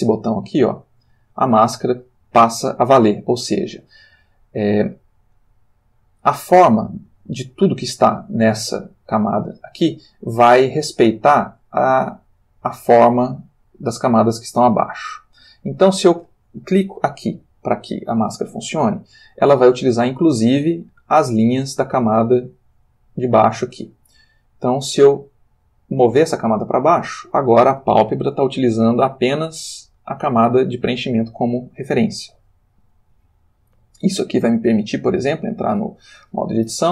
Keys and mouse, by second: 0.1 click, 3.5 click, 17.3 click, 25.8 click, 34.5 Tab, 35.6 click, 36.6 l.